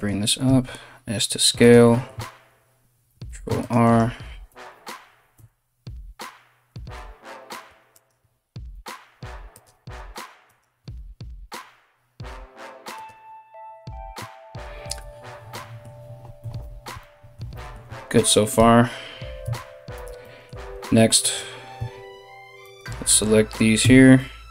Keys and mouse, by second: 0.1 s, 2.7 ctrl+r, 4.1 KP_1, 4.1 KP_2, 4.9 KP_1, 6.3 z, 7.5 alt+right click, 8.3 s, 9.7 right click, 10.0 right click, 10.9 s, 14.4 z, 16.0 KP_3, 19.0 Tab, 19.6 Tab, 20.8 right click, 20.9-22.2 middle drag, 22.2 right click, 22.3-24.5 middle drag, 23.4 KP_3.